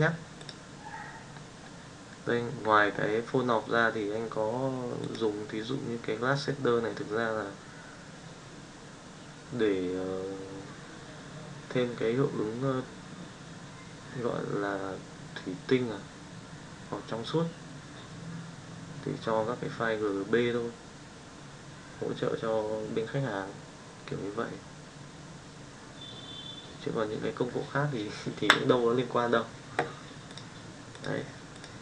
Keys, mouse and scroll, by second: 5.0 click, 30.2-31.2 drag, 31.5 click.